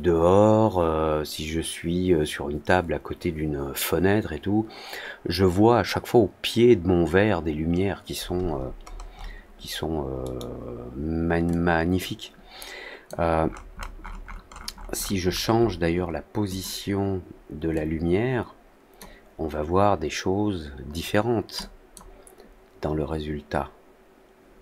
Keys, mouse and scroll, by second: 8.8-9.3 scroll down 2, 10.2-11.4 scroll up 1, 11.4-13.0 drag, 13.4 middle click, 13.7 middle click, 14.0 middle drag, 14.4-14.8 middle drag, 15.2 middle click, 15.5-16.4 middle drag, 16.4 click, 17.7-18.9 drag, 21.5 click.